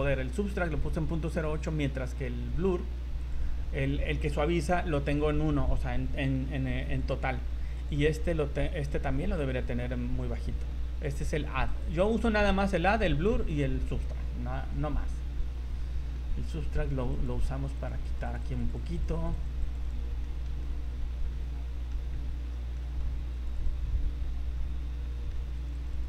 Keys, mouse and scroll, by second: 1.5 click, 7.0 click, 8.9 click, 11.7 click, 14.6-15.2 scroll down 4, 15.3 middle click, 16.3-16.6 scroll up 4, 17.1 click, 18.0 click, 18.2 click, 18.4 click, 18.7 click, 18.9 click, 19.1 click, 19.3 click, 19.6 click, 19.8 click, 20.2 middle click, 20.6 middle click, 21.4 middle click, 22.2 middle click, 22.7 middle click, 23.3 click, 23.5 click, 23.9 scroll down 3, 24.2 middle click, 24.8 scroll up 3, 25.0 middle click, 25.5 click, 25.8 click, 26.0 click.